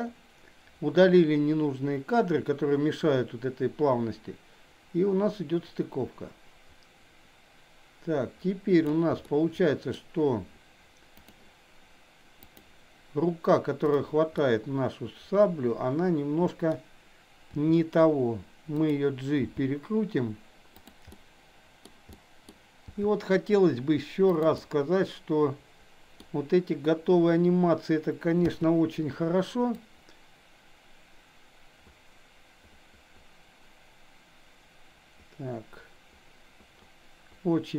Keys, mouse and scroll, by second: 9.2-10.0 middle drag, 11.1 click, 12.5 click, 14.5-16.7 middle drag, 17.5 r, 19.5 g, 21.1-22.0 middle drag, 22.1-22.5 middle drag, 22.9 g, 24.6-26.2 middle drag, 28.5 i, 29.7-37.7 drag.